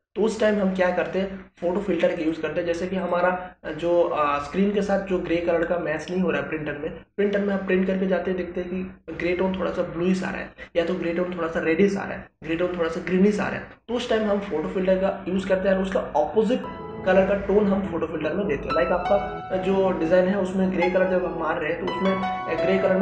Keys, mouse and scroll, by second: 2.2 click.